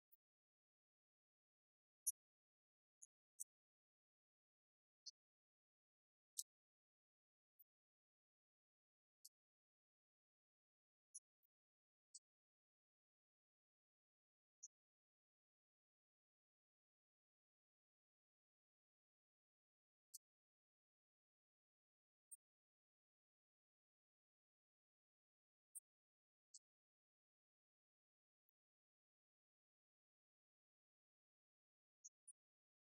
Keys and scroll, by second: 0.0-1.2 typing, 2.4-7.0 typing, 7.9 Return, 8.1 Up, 8.2 Right, 8.6 Left, 8.7 Down, 9.3 ctrl+d, 9.5 Right, 15.0 Right, 15.4 Left, 16.7-19.3 typing, 19.9 ctrl+d, 20.3 Right, 21.1 Up, 23.9 ctrl+Left, 24.6 ctrl+Right, 25.2 Right, 27.8 Right, 29.4-30.7 typing, 32.1-32.9 typing.